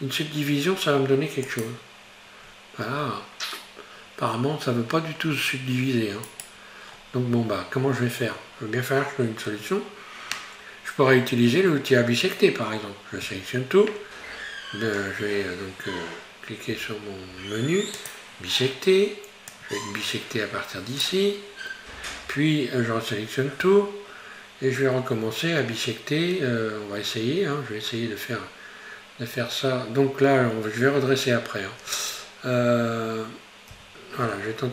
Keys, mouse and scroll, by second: 2.5-5.2 scroll up 4, 5.2-6.3 scroll down 3, 6.3 right click, 6.9-8.4 scroll down 3, 13.3 a, 16.8 q, 23.7 a, 33.8 q.